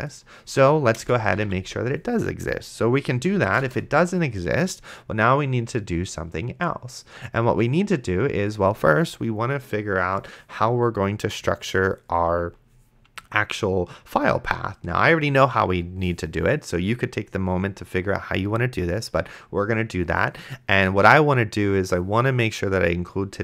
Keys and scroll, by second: 0.9-3.1 typing, 3.6 Return.